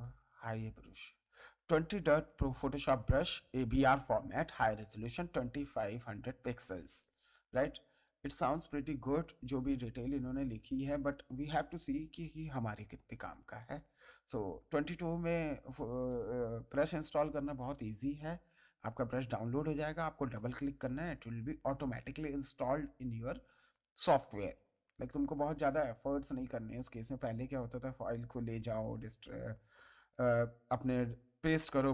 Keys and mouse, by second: 7.9 click, 16.1 click, 30.1 click.